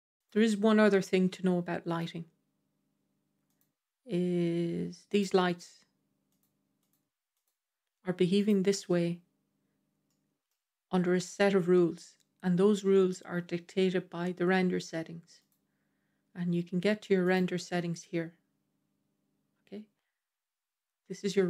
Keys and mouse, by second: 0.0 click, 0.7-1.8 middle drag, 3.4 click, 6.2 click, 7.2 click, 8.2 click, 9.9-10.3 middle drag, 15.3 click.